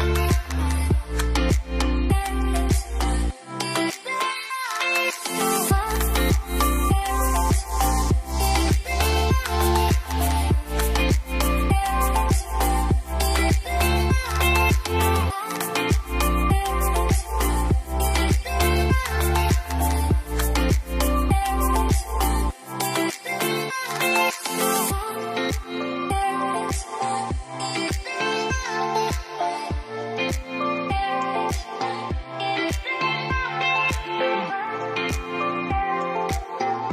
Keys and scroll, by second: 3.2-4.2 typing, 19.9 ctrl+z, 21.3 ctrl+z, 24.6-25.7 typing, 30.4-31.2 typing, 33.3 Return.